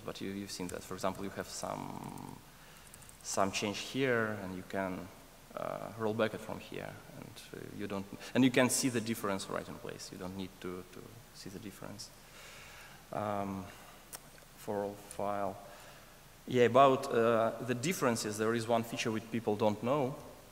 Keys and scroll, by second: 1.6 alt+BackSpace, 15.0 alt+BackSpace, 19.2 super+s.